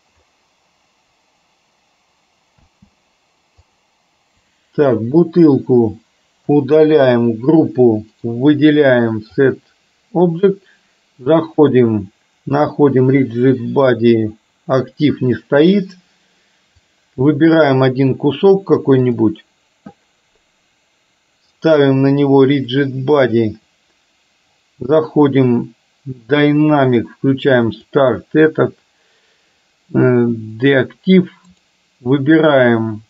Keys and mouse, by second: 2.6 space, 3.8 click, 6.6 Delete, 8.2-9.6 right drag, 11.6-16.9 drag, 19.3 click, 26.9 click, 27.7 click, 31.6-33.0 right drag.